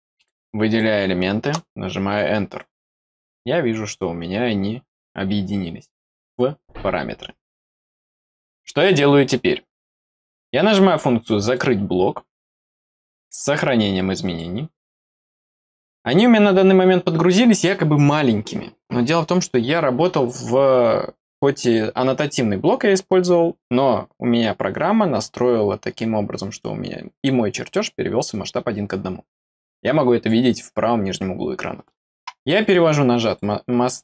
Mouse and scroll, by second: 0.1 click, 0.6 click, 11.3 click, 14.1 click, 16.2 scroll down 1, 33.2 click.